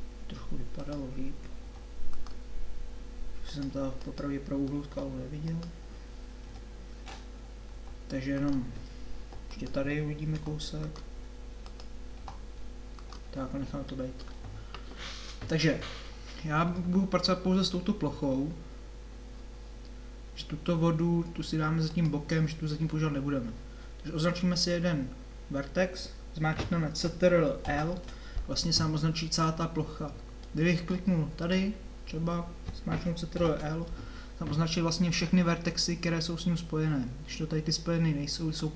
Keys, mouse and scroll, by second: 1.7 g, 6.5 KP_7, 7.7 g, 10.4 g, 12.2 g, 13.4 middle click, 18.0-20.6 middle drag, 22.0-27.7 drag, 27.7 ctrl+l, 30.5 middle click, 31.5 middle click, 33.3 ctrl+l.